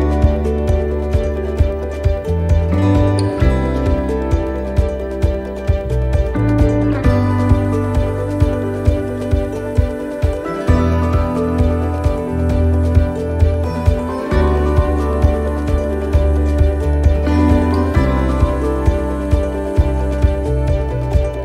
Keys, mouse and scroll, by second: 7.5 click, 8.7 click, 10.9 click, 11.6 click, 15.5 right click, 17.4 shift+right click, 19.0 click.